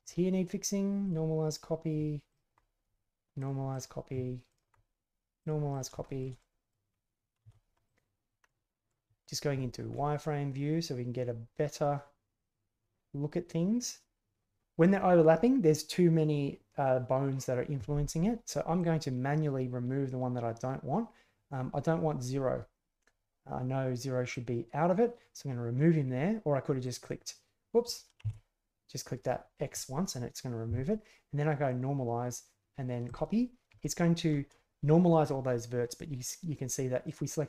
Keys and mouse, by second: 1.1 click, 2.3 alt+click, 3.4 click, 3.7 click, 4.5 alt+right click, 5.4 click, 6.0 shift+middle drag, 6.4-6.7 middle drag, 8.4-8.9 middle drag, 9.2 alt+click, 9.9-14.6 middle drag, 18.8-21.6 drag, 24.4-25.8 drag, 26.9 click, 27.0 click, 28.2 ctrl+z, 31.7 click, 33.1 click, 33.8-34.3 shift+middle drag, 37.0 right click.